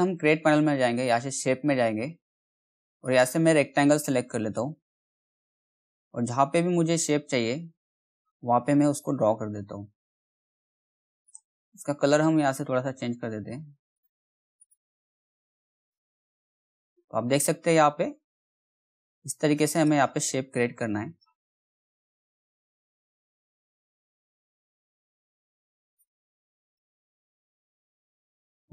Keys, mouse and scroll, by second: 3.0-11.1 drag, 13.9 click, 15.7 right click, 16.2-25.8 drag.